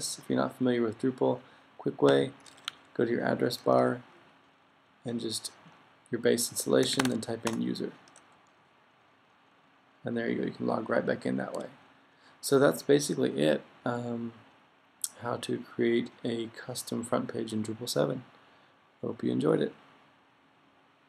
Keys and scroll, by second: 5.9 Right, 6.6-7.5 typing, 8.6-10.1 typing, 12.1-12.9 typing.